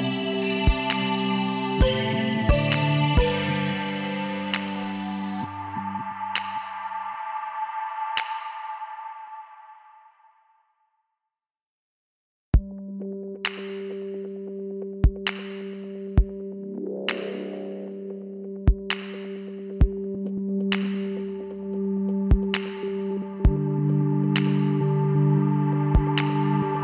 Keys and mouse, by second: 0.4 s, 0.7-2.7 middle drag, 3.2 e, 7.5-9.5 middle drag, 9.5-12.2 drag, 12.2-13.3 middle drag, 12.4 click, 13.7 w, 17.5 a, 19.6-20.6 middle drag, 20.6 click, 21.6-23.0 middle drag, 23.0 click, 23.0-26.8 middle drag, 24.0 s, 25.5 e.